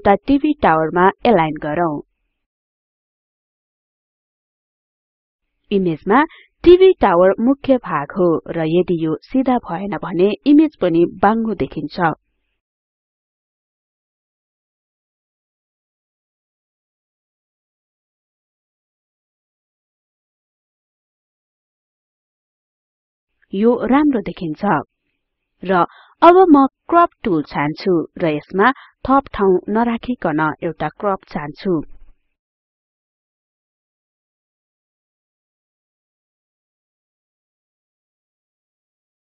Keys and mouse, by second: 7.1-11.1 drag, 11.6 click, 27.1 click, 32.1-36.6 drag, 37.6-39.3 drag.